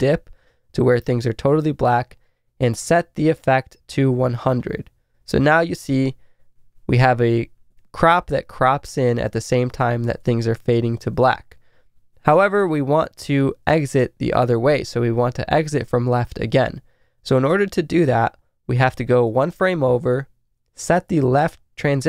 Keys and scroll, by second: 5.5 Left, 7.9 Right, 9.8 Left, 11.0 Right, 12.0 ↔, 12.1 Left, 12.4 Right, 13.1 Right, 19.6 Right.